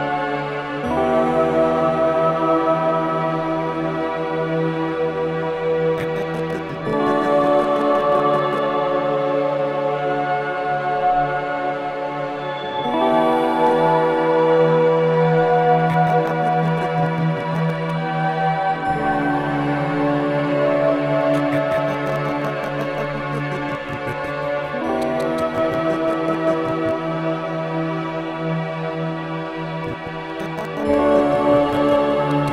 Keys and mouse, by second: 0.8 click, 1.2 click, 2.5 click, 3.5 d, 5.2 click, 5.9-9.1 drag, 8.1 typing, 9.7 click, 10.7-11.1 typing, 12.5-13.3 drag, 13.6-32.5 drag.